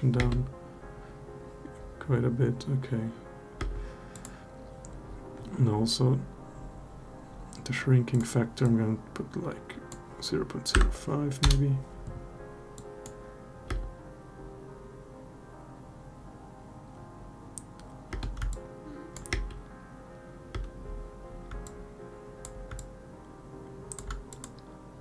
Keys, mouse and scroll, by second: 3.4 space, 7.9-11.2 drag, 12.5-12.9 drag, 13.5 space, 18.0 space, 18.3-18.9 alt+drag, 19.1 space, 20.3 space, 21.4-22.2 alt+drag, 22.5-23.7 alt+drag.